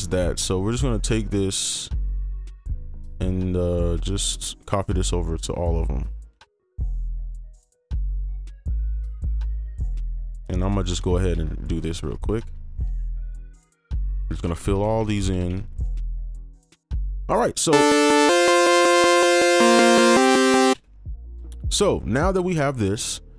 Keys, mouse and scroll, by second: 0.1 right click, 0.6 ctrl+click, 2.5 right click, 3.9 ctrl+click, 4.4 shift+click, 5.3 right click, 6.4 ctrl+click, 7.5 shift+click, 8.1 right click, 8.7 ctrl+click, 10.1 ctrl+click, 10.9 ctrl+b, 11.0 ctrl+b, 11.8 right click, 12.2 ctrl+click, 12.4 ctrl+b, 13.2 right click, 13.5 ctrl+click, 14.3 ctrl+b, 14.6 ctrl+b, 14.8 ctrl+b, 15.0 ctrl+b, 15.1 ctrl+b, 15.3 ctrl+b, 15.4 ctrl+b, 16.4 ctrl+b, 16.9 right click, 20.7 space.